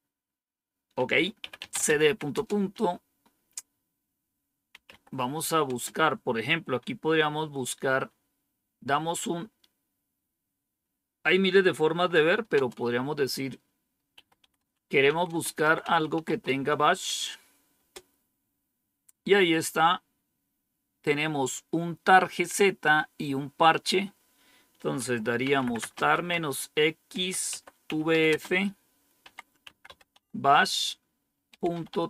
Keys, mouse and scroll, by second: 1.1-2.4 typing, 4.4-5.6 typing, 12.1-12.5 typing, 13.8-16.7 typing, 17.7 Return, 25.0-32.0 typing.